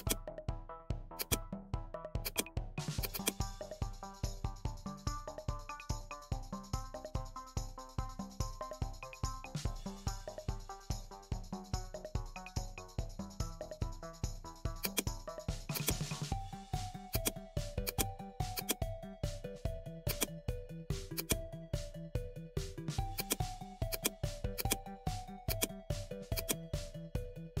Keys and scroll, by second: 5.1 shift+d, 7.1-10.6 typing, 9.7 Return, 12.5-13.1 typing.